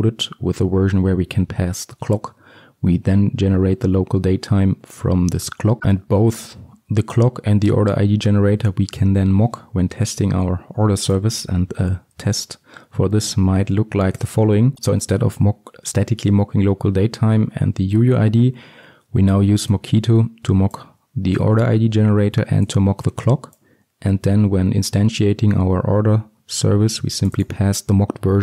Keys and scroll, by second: 5.8 ctrl+alt+Left, 12.9 ctrl+shift+t.